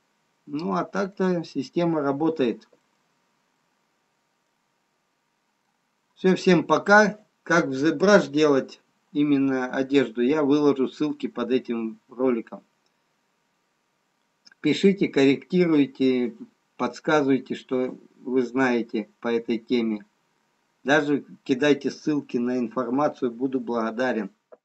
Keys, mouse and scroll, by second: 0.3 middle click, 0.3-2.2 scroll up 2, 2.2-2.9 scroll down 2, 2.9 middle click, 2.9-3.8 scroll down 3, 3.8 middle click, 5.4-6.3 scroll up 3, 6.3 middle click.